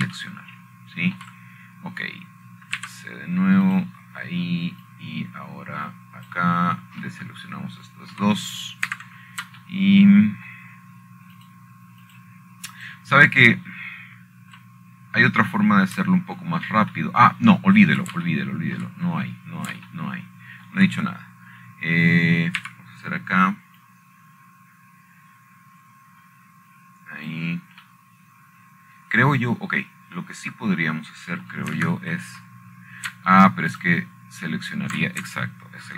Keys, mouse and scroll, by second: 0.3 middle click, 1.7 middle click, 2.3 Escape, 3.9 shift+middle click, 5.5 c, 6.4 click, 7.6-9.1 drag, 9.9 middle click, 11.0 middle click, 11.6 Escape, 13.3 shift+middle click, 14.1 shift+click, 14.8 click, 15.5 click, 16.8-18.0 scroll down 7, 20.6 shift+middle click, 21.6 shift+middle click, 21.9-22.8 scroll up 1, 22.2 middle click, 22.6-24.6 shift+middle drag, 25.3 c, 26.5-31.0 drag, 34.2 middle click, 34.5 Escape.